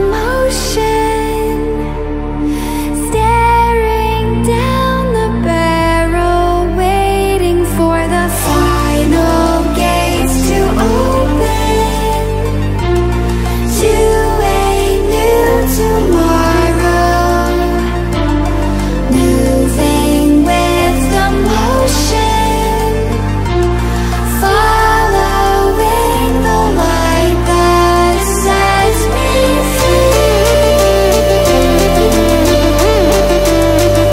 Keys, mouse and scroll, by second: 15.8 click, 16.7 Right, 19.2-30.4 drag, 30.9 ctrl+alt+scroll up 1, 31.5 ctrl+alt+scroll up 1, 32.3-33.9 drag.